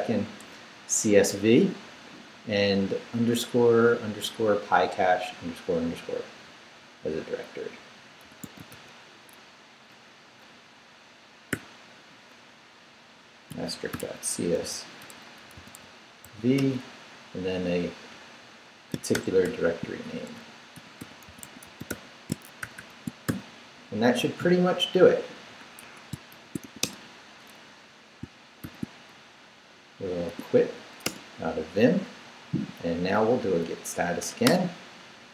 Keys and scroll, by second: 8.0-9.2 typing, 9.9 Return, 11.5-16.2 typing, 16.6 Return, 19.1 shift+-, 20.5-24.1 typing, 25.6-27.1 typing, 28.6 shift+;, 30.3 q, 31.0 Return, 32.9 Up, 34.4 Return.